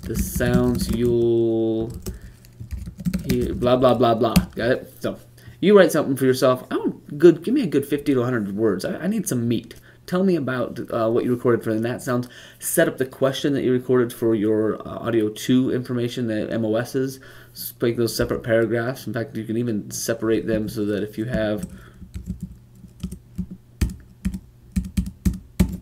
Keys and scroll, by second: 0.2-4.1 typing, 20.2 Left.